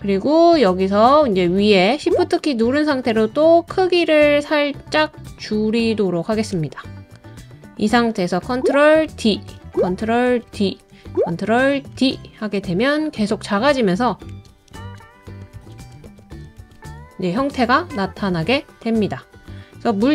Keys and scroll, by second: 9.1 super+d, 10.3 super+d, 11.9 super+d, 14.3 super+d, 14.8 super+d, 15.5 super+d, 16.0 super+d, 16.6 super+d.